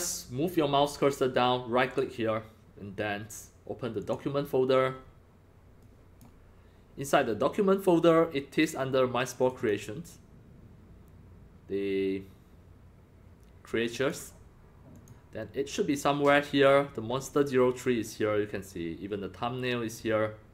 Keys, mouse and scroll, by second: 1.9 right click, 4.0 click, 5.8 click, 9.4 click, 9.6 click, 13.9 click, 14.0 click, 14.9 click.